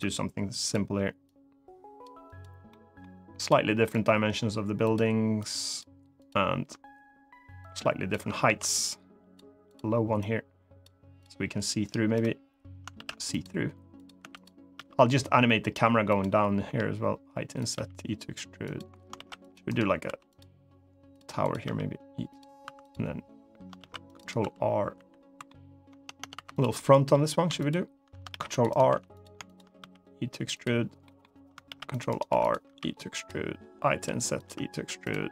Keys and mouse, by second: 0.4 click, 1.0 click, 2.1 click, 2.4 middle click, 3.1 click, 3.7 click, 4.6 click, 7.4 click, 8.2 ctrl+z, 8.6 click, 9.4 click, 10.0 click, 12.7 ctrl+r, 13.7 click, 13.9 3, 14.1 click, 14.5 e, 15.8 click, 16.4 i, 17.3 click, 18.4 click, 18.4 e, 18.9 ctrl+r, 19.4 right click, 19.8 3, 20.0 click, 21.1 click, 21.4 e, 22.0 click, 22.4 2, 22.6 click, 23.5 ctrl+r, 23.9 right click, 24.1 2, 24.7 1, 25.1 2, 25.3 click, 25.6 Tab, 25.9 Tab, 26.1 3, 26.5 middle click, 27.3 shift+click, 28.0 ctrl+r, 28.4 right click, 28.6 3, 29.2 shift+click, 29.5 e, 30.2 click, 30.8 middle click, 31.4 ctrl+r, 31.8 right click, 32.0 3, 32.4 e, 32.9 click, 33.6 i, 34.1 click, 34.2 e, 34.8 click, 35.2 click.